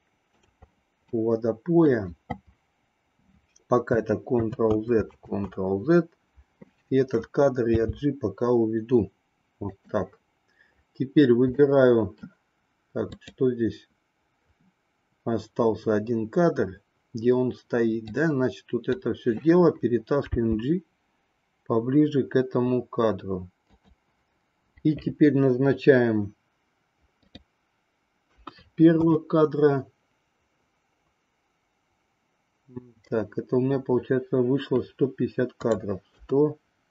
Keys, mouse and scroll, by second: 1.1 middle click, 4.5 ctrl+z, 11.5 middle click, 13.1 click, 18.0-19.0 drag, 20.3 g, 27.3-29.3 drag, 35.6-36.9 drag.